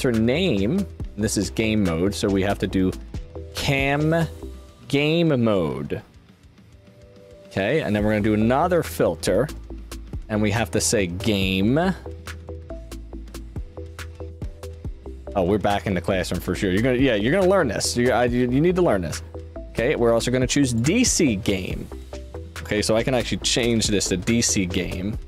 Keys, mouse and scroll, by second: 2.4 click, 4.3 click, 8.0-8.6 drag, 10.4 click, 12.8 click, 12.8 right click, 17.1 click, 20.6 click, 22.3 click, 22.9-24.5 typing.